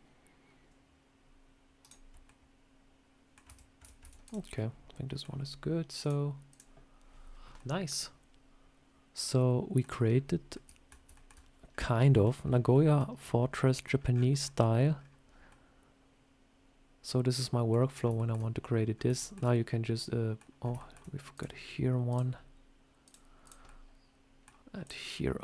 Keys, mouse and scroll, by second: 2.1 middle click, 3.3 Tab, 3.7 Tab, 3.9 Tab, 4.1 click, 4.3 scroll down 2, 4.4 middle click, 5.9 click, 7.4 middle click, 10.0-10.4 scroll up 3, 10.4 middle click, 11.0 shift+middle click, 14.5 scroll down 1, 15.4 middle click, 17.8 scroll up 2, 18.0 shift+middle click, 18.8 scroll up 1, 19.0 shift+middle click, 19.4 middle click, 20.5 scroll up 3, 20.6 shift+middle click, 21.2 click, 22.0 click, 23.4 click, 23.5 middle click, 24.7 click.